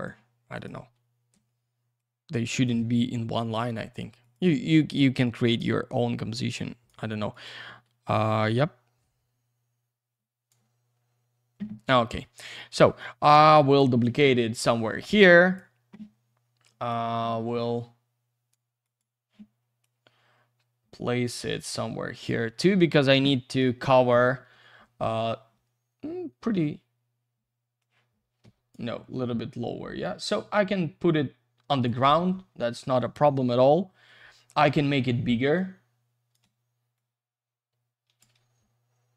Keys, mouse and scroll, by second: 2.0 click, 2.9 F3, 4.2 click, 5.4 click, 7.3 click, 8.3 click, 12.8 shift+click, 15.4 click, 18.8 click, 19.8 click, 22.5 F3, 25.5 F3, 26.6 w, 27.8 click, 28.4 Escape, 29.7 w, 30.0 click, 32.1 F3, 32.7 alt+shift+q, 35.1 r, 35.5 click, 36.9 click, 38.3 F3.